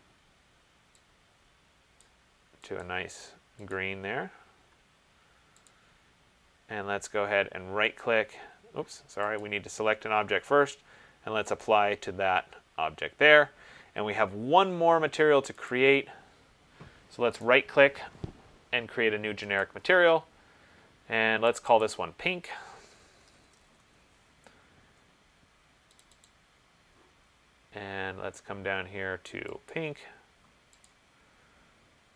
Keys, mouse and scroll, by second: 2.1 click, 3.0 click, 3.9 click, 5.9 click, 8.2 right click, 9.6 click, 11.8 click, 15.9 click, 17.6 right click, 19.8 click, 21.7 click, 22.1 click, 23.2 ctrl+a, 23.5-23.9 typing, 26.2 click, 26.5 click, 29.9 click, 31.0 click.